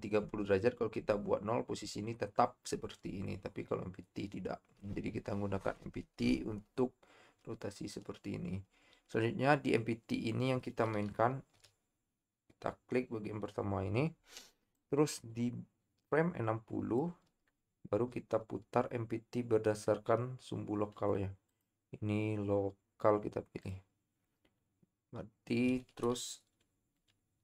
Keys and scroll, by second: 11.8 i.